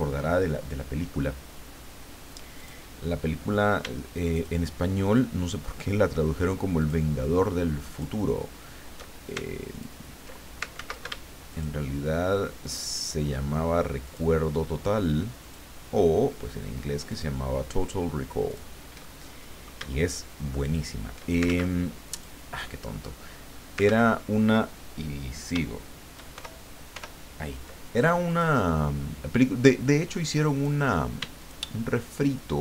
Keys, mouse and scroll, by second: 0.6 middle click, 2.6 click, 4.3 shift+click, 5.4 shift+click, 6.8 shift+click, 7.9 shift+click, 9.7 ctrl+click, 10.7 ctrl+z, 11.5 shift+click, 12.6 shift+click, 14.0 shift+click, 15.4 shift+click, 17.1 shift+click, 18.5 shift+click, 19.1 shift+middle click, 19.4 click, 20.6 shift+click, 21.4 ctrl+shift+z, 22.1 click, 22.7 click, 23.8 ctrl+z, 26.3 ctrl+shift+y, 28.3 click, 30.5 click, 31.4 shift+click.